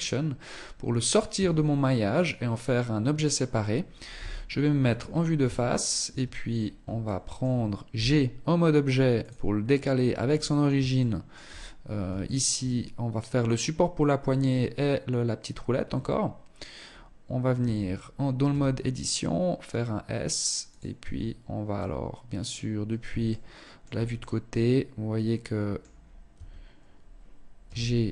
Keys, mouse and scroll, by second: 0.6 Tab, 1.4 right click, 3.4 KP_1, 4.1-4.4 scroll down 5, 4.4 Tab, 5.4 Tab, 5.8-6.3 scroll down 1, 6.3 shift+middle click, 6.3 scroll down 2, 7.2 g, 9.5-10.1 scroll up 4, 10.2 shift+middle click, 11.6 shift+middle click, 11.9-12.4 scroll down 4, 12.4-13.4 scroll up 1, 13.9-14.6 scroll up 2, 15.2 scroll down 1, 15.2 scroll up 1, 16.2-16.9 scroll up 1, 16.9 Tab, 17.8 s, 20.3 Tab, 21.0 middle click, 22.6 shift+middle click, 23.4 middle click, 25.2 scroll up 3, 25.6 Tab, 27.0 g.